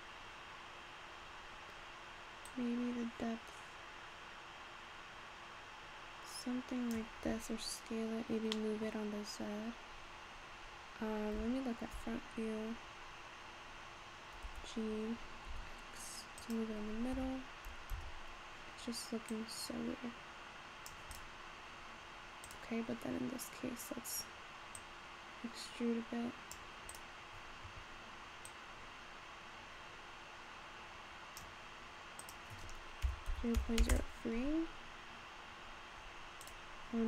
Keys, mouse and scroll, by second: 0.1 scroll down 2, 0.9-1.7 scroll down 2, 1.7-2.5 scroll down 5, 2.5-5.5 drag, 7.9-8.6 scroll down 3, 8.6-11.4 middle drag, 11.4 `, 17.2 Tab, 18.0 Tab, 19.3-21.2 drag, 21.8-22.4 scroll up 2, 22.4 click, 24.8-27.0 drag, 28.4-31.5 drag, 32.2-35.2 drag, 35.6-36.5 scroll up 3, 36.5 click.